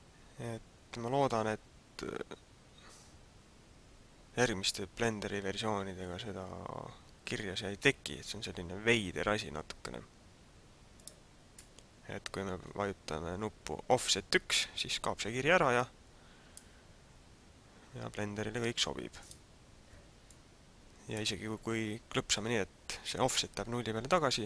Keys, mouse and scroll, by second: 11.0 click, 15.8 click, 19.2 click, 20.2 click.